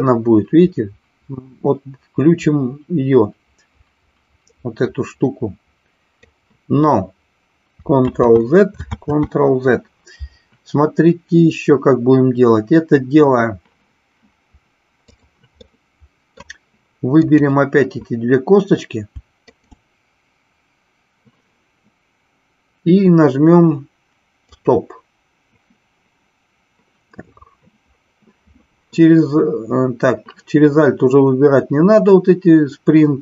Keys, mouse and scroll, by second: 8.1 ctrl+z, 8.9 ctrl+z, 15.1 click, 15.7-16.3 middle drag, 17.2-18.7 drag, 19.6 shift+click, 24.6 click.